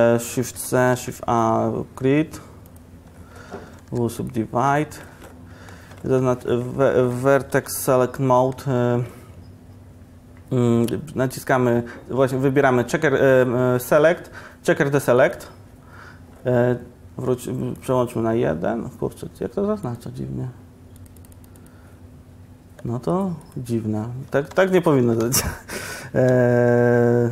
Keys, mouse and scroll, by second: 0.6 shift+c, 1.0 shift+a, 3.4 Tab, 3.9 w, 6.2 1, 8.6 KP_Decimal, 24.6 q, 25.1 a, 25.3 a.